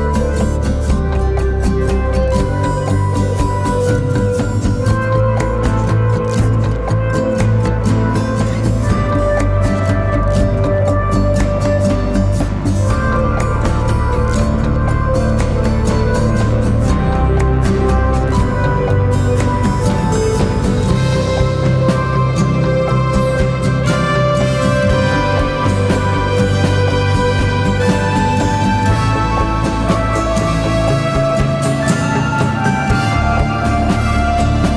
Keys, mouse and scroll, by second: 28.9 alt+click.